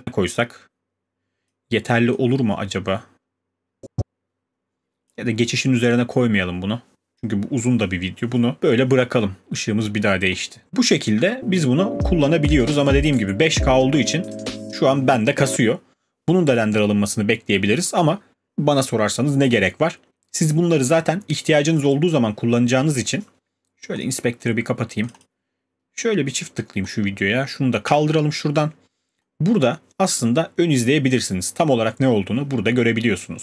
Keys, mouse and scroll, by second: 8.6 click, 10.4 click, 21.7 click, 21.9 click, 24.0 click, 25.1 click, 25.2 click, 26.9 click, 27.9 q, 32.6 click, 33.3-33.4 scroll.